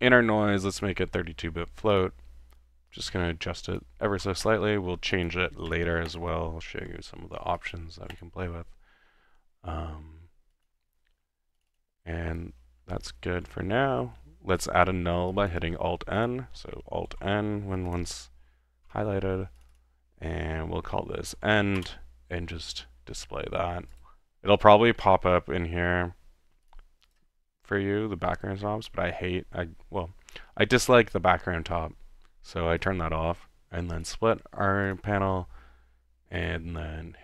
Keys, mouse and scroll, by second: 0.8-1.1 drag, 1.9 click, 2.0 typing, 3.1-3.6 drag, 3.8-4.3 drag, 5.1 click, 7.6 click, 10.5 click, 10.9 middle click, 11.6 click, 13.3 alt+n, 14.7 alt+click, 15.3 click, 15.7-16.2 middle drag, 16.2 click, 16.5 middle click, 17.1 alt+n, 17.9 alt+click, 18.9 ctrl+z, 19.6 ctrl+click, 21.2-22.0 typing, 22.7-23.9 drag, 24.1-24.6 middle drag, 26.7-27.0 drag, 27.2 click, 32.8 click, 34.0 click, 34.8-35.5 typing, 34.9 click, 36.4 click.